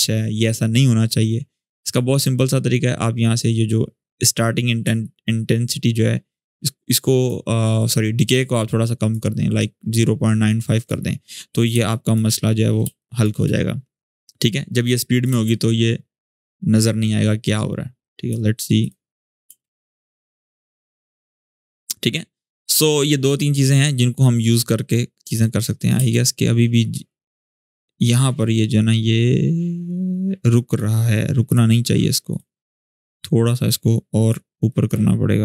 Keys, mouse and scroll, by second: 4.6 click, 4.8-7.3 ctrl+drag, 11.1-11.5 scroll up 1, 11.5 space, 11.6 click, 12.0 space, 12.1-12.6 scroll up 1, 12.6 space, 12.7 click, 13.1 space, 14.1 alt+scroll down 1, 14.6-15.2 click, 15.0 space, 16.8-17.8 scroll down 1, 17.8 click, 19.2 space, 25.0 click, 25.3-25.6 click, 25.7 space, 28.1-30.6 drag, 32.6 alt+scroll up 1, 33.4-34.3 drag.